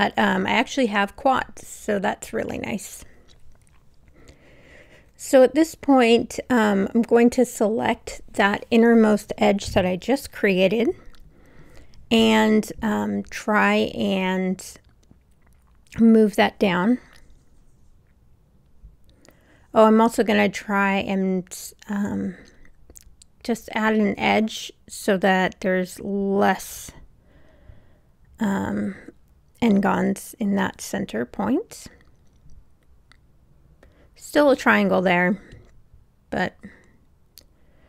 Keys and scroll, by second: 30.7 Return.